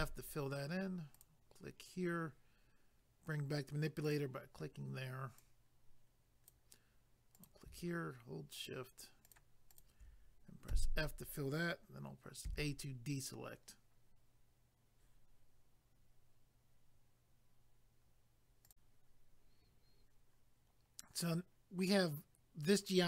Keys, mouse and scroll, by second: 1.1 click, 4.0 click, 5.4 click, 7.3 click, 8.6 shift+click, 9.8 shift+double click, 10.7 f, 18.6 click.